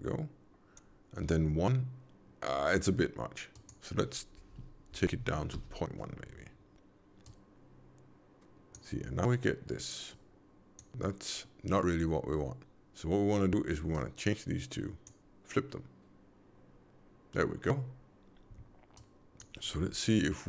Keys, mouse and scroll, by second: 3.5 click, 7.2 click, 10.1 click, 13.8 click, 18.9 click.